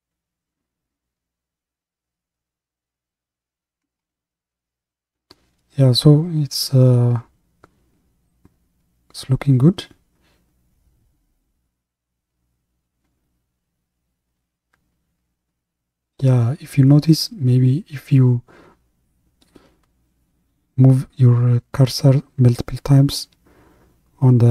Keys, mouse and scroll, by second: 4.3-7.5 middle drag, 9.5-18.2 drag, 18.2 scroll down 1, 18.3 middle click, 19.2-19.6 scroll up 2, 19.6 scroll down 1, 19.8-23.2 middle drag, 23.2-24.5 drag.